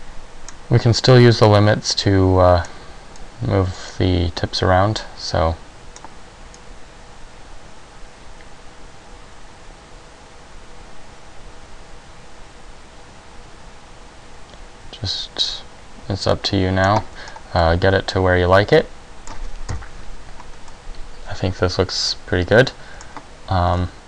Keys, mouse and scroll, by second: 1.2 click, 3.3 click, 6.7 click, 17.4-18.0 scroll up 2, 17.8 middle click, 19.8 KP_1, 20.8 middle click, 23.8 r.